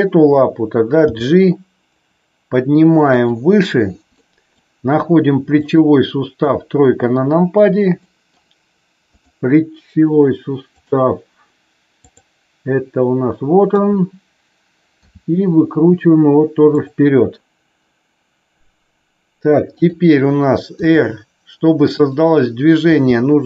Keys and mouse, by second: 1.0 g, 4.1 middle click, 5.5 click, 6.3 KP_3, 8.0 middle click, 9.1 click, 12.0 click, 13.7 KP_3, 14.9 r, 19.8 click, 20.7 r, 21.9 click, 22.9 g.